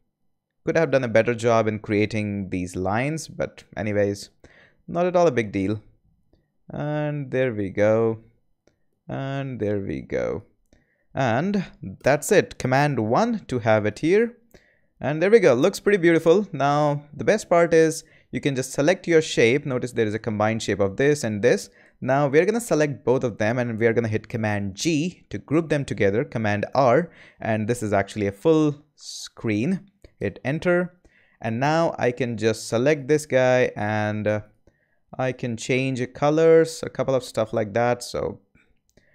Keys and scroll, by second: 11.9 Return, 12.9 super+Return, 13.0 super+i, 24.7 super+g, 26.6 super+r, 27.6-29.8 typing, 30.1 Return.